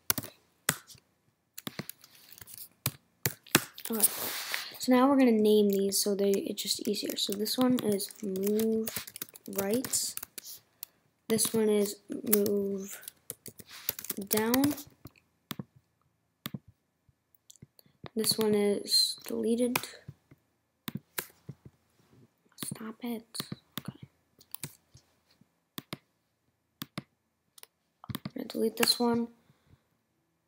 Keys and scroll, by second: 2.4 2, 8.4 shift+m, 15.5 n, 19.7 BackSpace, 21.2 BackSpace, 28.8 BackSpace.